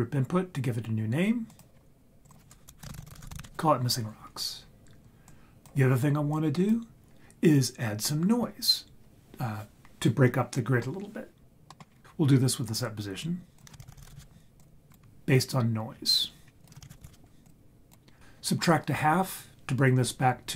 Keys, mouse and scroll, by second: 1.5 click, 2.5 click, 3.0 s, 5.2 click, 6.3 click, 11.7 middle click, 11.9 scroll down 2, 12.0 ctrl+z, 12.0 click, 13.6 click, 13.8 shift+a, 13.9 s, 15.7 scroll down 3, 16.4 scroll up 2, 16.6 click, 16.8 shift+a.